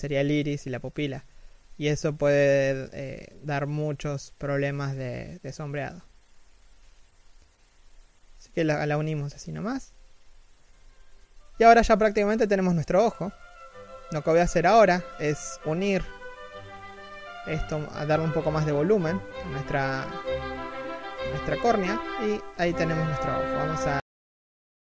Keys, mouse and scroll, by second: 7.8 z, 7.9-8.3 scroll down 1, 8.3 middle click, 8.9 KP_1, 10.4 right click, 10.5 r, 11.4 z, 11.7 KP_3, 12.1-12.5 scroll up 1, 12.5 middle click, 12.8-15.6 typing, 13.0 middle click, 13.8 scroll up 1, 15.0 scroll up 1, 15.2 alt+right click, 18.7 scroll down 1, 18.9 middle click, 19.6 scroll down 1, 19.7 middle click, 20.3 3, 20.7 scroll up 1, 21.1 alt+right click.